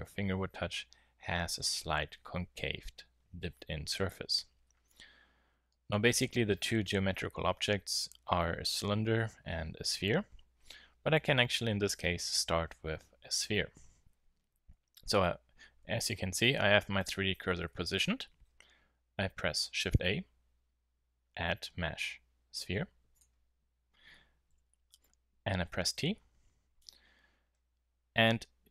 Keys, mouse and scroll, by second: 19.8 shift+a, 24.5 t.